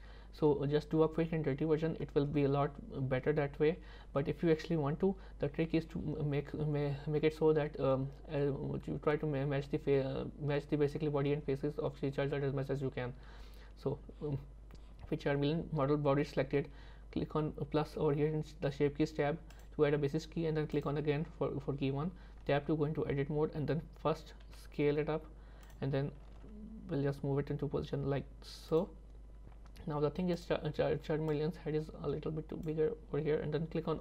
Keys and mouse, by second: 19.6 click, 20.7 click, 22.4 Tab, 24.5 s, 26.3 g, 30.4 click, 31.4-32.7 drag.